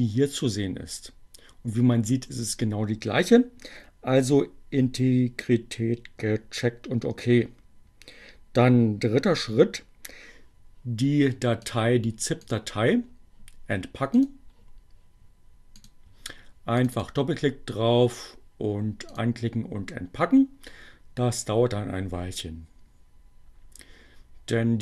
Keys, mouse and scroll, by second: 14.2 click, 15.7 click, 16.8 click, 19.2 click.